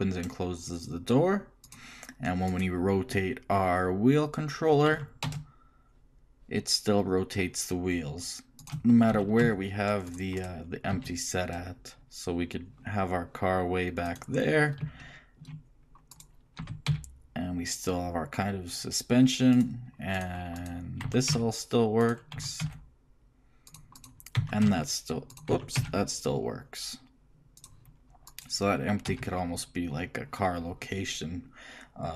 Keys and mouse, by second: 2.7-4.5 right drag, 5.1 r, 8.6 g, 8.6 z, 9.3 g, 10.6 shift+right click, 10.7 shift+click, 11.1 shift+g, 11.6 click, 16.8 shift+g, 17.1-18.2 right drag, 20.3 right click, 21.2 r, 22.5 r, 24.2-26.0 right drag, 24.6 r, 25.7 r, 28.5 right click, 29.3 g.